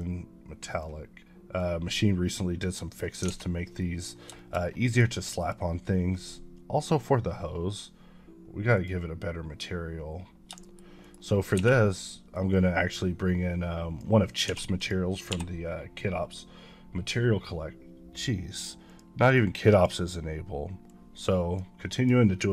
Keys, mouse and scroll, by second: 1.8 click, 3.0 click, 3.3 a, 3.4 scroll down 1, 3.7 middle click, 4.2 shift+middle click, 4.5 scroll down 1, 4.7 middle click, 5.3-7.9 drag, 8.6 click, 10.5 shift+middle click, 10.9 shift+right click, 11.4 shift+a, 12.4-13.9 drag, 14.3 s, 14.6 click, 15.2 n, 18.8 click, 21.0 click.